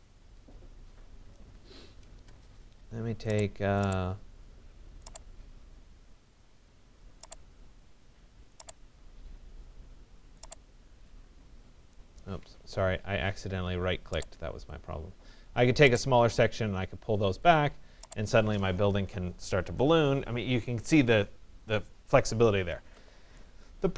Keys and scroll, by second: 1.7 Return, 12.1 Escape.